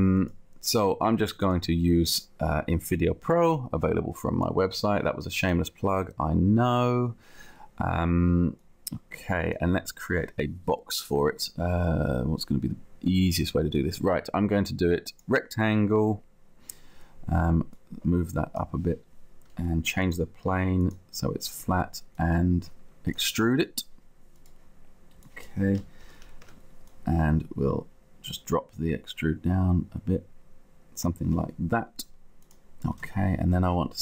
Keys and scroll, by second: 26.0 0, 26.5 Return, 27.9 Return, 33.1 space.